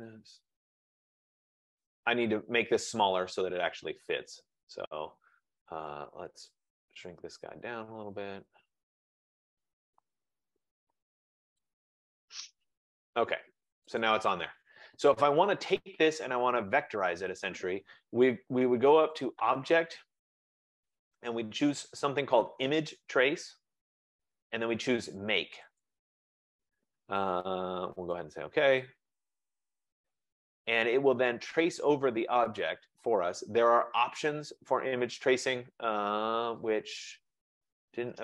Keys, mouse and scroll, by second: 0.2 ctrl+-, 0.5 ctrl+-, 0.8 ctrl+-, 3.1 click, 9.6 shift+click, 13.9 click, 15.0 F15, 25.9 click, 28.2 click.